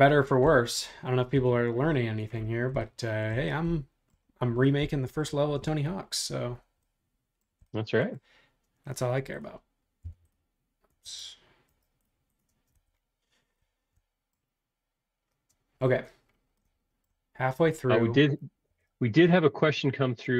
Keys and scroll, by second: 10.0 b, 11.0 super+z, 12.5 space, 18.7 super+1.